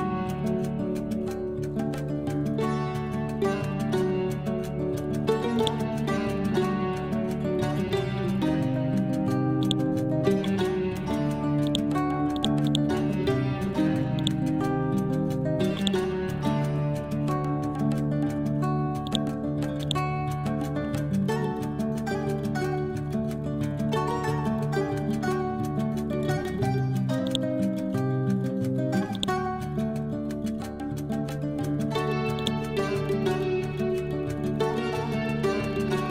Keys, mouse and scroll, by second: 1.4 scroll up 1, 2.3 Left, 3.9 scroll up 1, 5.6-7.2 drag, 7.2 Up, 8.9 scroll down 1, 9.6 click, 10.5 scroll down 1, 11.0-11.7 scroll up 1, 11.7-15.4 drag, 15.4 ctrl+z, 15.8 click, 16.7 Up, 17.9 scroll up 1, 19.1 shift+click, 19.6 c, 19.9 click, 20.3 scroll down 1, 21.3-21.7 scroll up 1, 24.0 scroll down 1, 26.7-27.3 scroll down 1, 27.3 ctrl+click, 30.0 ctrl+z, 30.9 scroll up 1, 32.4-34.4 drag, 34.4 scroll down 1, 35.6-36.1 scroll up 1.